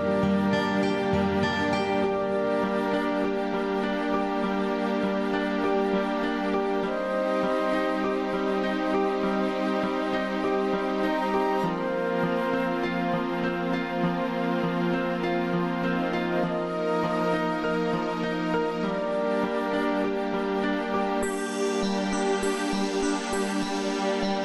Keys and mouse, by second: 0.1 click, 1.3 click, 2.4 click, 4.0 click, 4.7 click, 5.8 click, 7.3-9.7 drag, 10.0 click, 11.1 click, 13.5 click, 15.3 click, 16.8 click, 17.7 click, 19.7 click, 21.9 click.